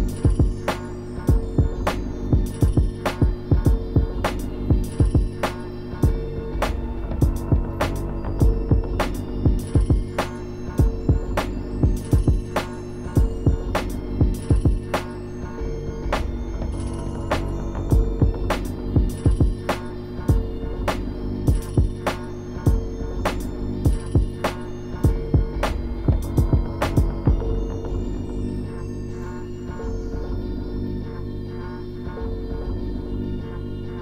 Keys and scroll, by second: 0.4 ctrl+z, 2.0 ctrl+z, 2.2 ctrl+z, 2.7 scroll up 1, 3.2 scroll up 1, 3.4 scroll down 1, 3.6 scroll up 1, 4.0 scroll down 1, 4.1 scroll up 1, 4.2-4.7 scroll down 2, 5.5-6.1 scroll up 2, 6.7-8.0 scroll down 4, 8.0 scroll up 1, 9.2 scroll up 1, 9.3 scroll down 1, 9.5 scroll up 1, 9.9 scroll down 1, 11.2 scroll up 1, 11.2 scroll down 1, 11.3 scroll up 1, 29.1 scroll down 1, 30.0 scroll up 1, 31.4 scroll down 1, 31.8 scroll up 1, 32.8 scroll up 1.